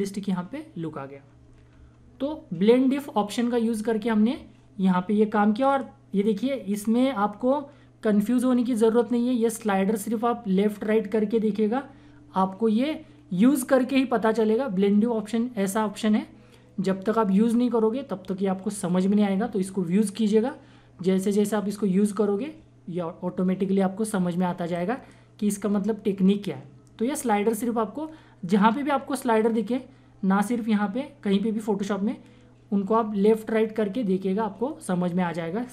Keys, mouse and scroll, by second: 1.1 typing, 1.4 ctrl+=, 1.7 ctrl+-, 5.5 click, 7.9 typing, 9.1-12.1 drag, 9.1-9.6 typing, 25.0-27.7 drag, 27.4 typing.